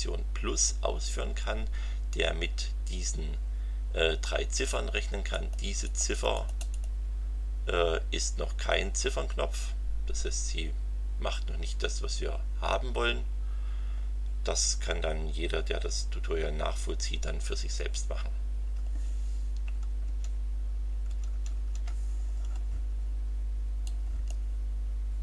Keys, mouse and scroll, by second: 5.3 click, 5.8 click, 20.0 alt+Tab, 20.8 alt+Tab, 23.8 click.